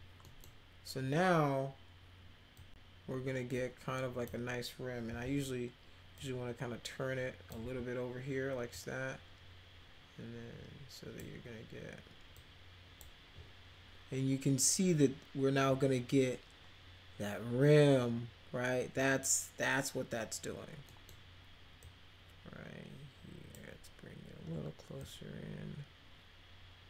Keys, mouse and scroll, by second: 0.3 middle click, 2.6-4.2 drag, 5.1 e, 6.1-7.5 drag, 7.6 w, 8.7-11.1 drag, 12.3 click, 20.8 middle drag, 21.8-23.5 drag, 25.0-26.8 drag.